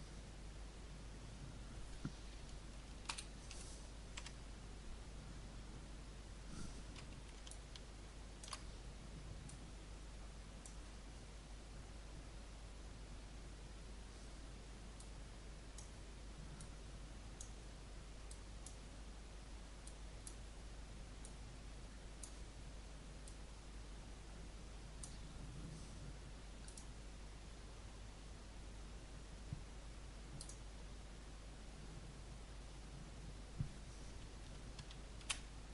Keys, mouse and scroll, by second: 3.0 ctrl+Up, 4.1 Home, 5.8 scroll down 1, 7.5-27.6 alt+shift+drag, 35.1 shift+d.